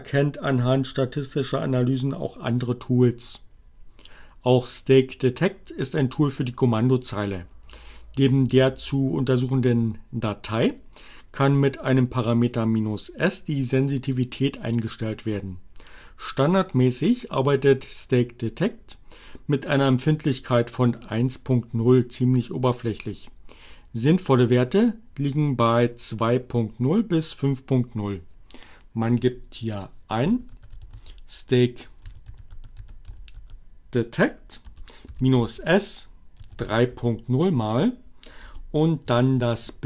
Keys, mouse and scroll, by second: 28.3 click, 28.8-32.4 typing, 33.7-35.4 typing, 37.0 space, 38.0-39.2 drag.